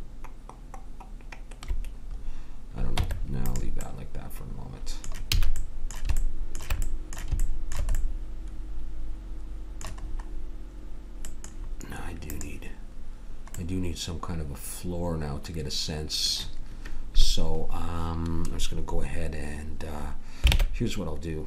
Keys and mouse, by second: 2.9 Tab, 5.3 a, 9.7-11.5 middle drag, 12.2-15.6 drag, 20.5 ctrl+Tab.